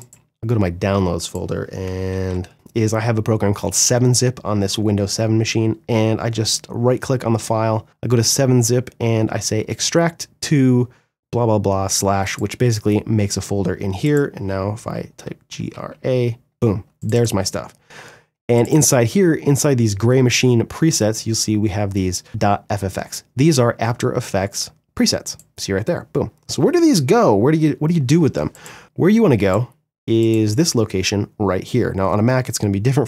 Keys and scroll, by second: 1.0 g, 1.2 r, 14.1 g, 14.4 r.